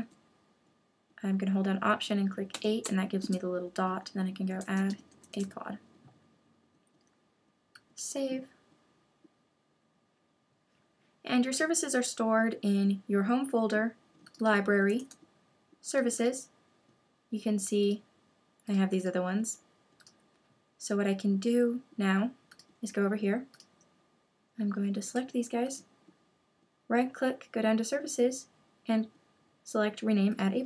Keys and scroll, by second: 25.0 super+a.